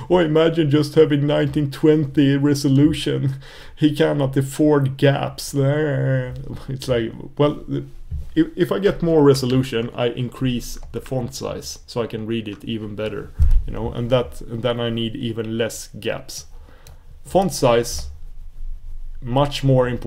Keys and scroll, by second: 9.5 super+s, 11.6 super+s.